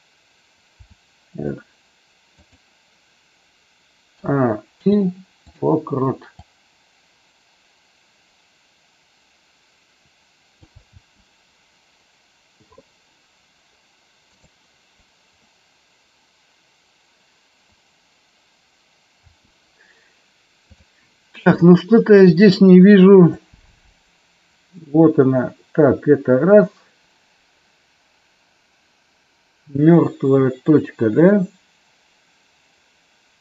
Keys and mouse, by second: 0.8 r, 4.2 a, 4.6 i, 6.4-10.6 drag, 10.9 space, 14.3 click, 19.3 space, 20.6 click, 23.3-33.4 drag.